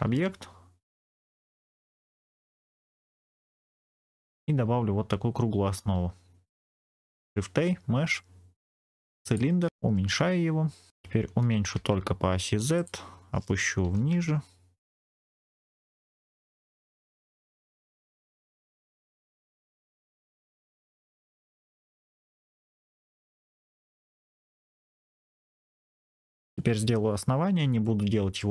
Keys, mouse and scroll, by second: 2.3 click, 2.9-3.9 middle drag, 6.7 shift+a, 10.9 click, 10.9-11.3 scroll up 4, 11.3 s, 11.6 z, 12.7 click, 13.7 g, 13.8 z, 15.5 click, 15.9 KP_1, 16.5 g, 16.9 click, 17.0 s, 17.5 click, 17.6 middle click, 18.0 s, 18.7 click, 19.1 g, 19.4 click, 19.4 z, 19.5 click, 19.6-20.0 scroll down 3, 19.8 middle click, 20.4-20.9 scroll up 4, 20.9-24.9 typing, 22.0 click, 22.7 click, 22.9 scroll down 3, 23.7 click, 23.9 scroll down 2, 24.0 scroll up 2, 24.6 click, 25.1 click, 25.2 click, 25.3 middle click, 27.7 middle click.